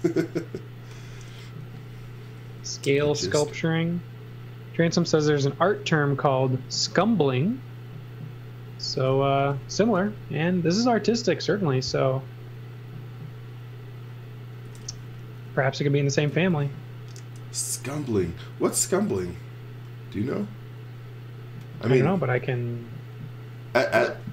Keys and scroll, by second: 1.4 space, 2.4 s, 8.6-9.9 typing, 14.4-16.5 typing.